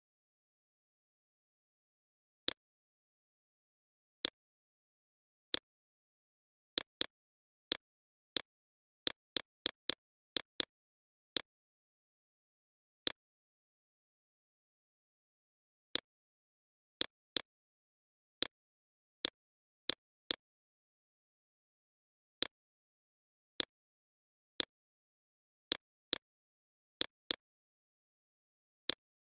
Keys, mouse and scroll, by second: 6.6 right click, 7.1 click, 9.7 alt+click, 10.5 click, 11.4-29.3 alt+shift+drag.